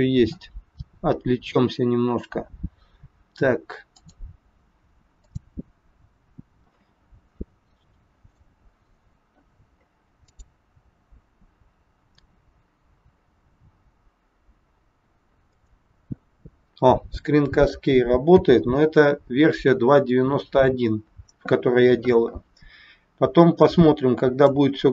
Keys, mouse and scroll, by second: 15.6 click, 18.3 n, 23.4 click.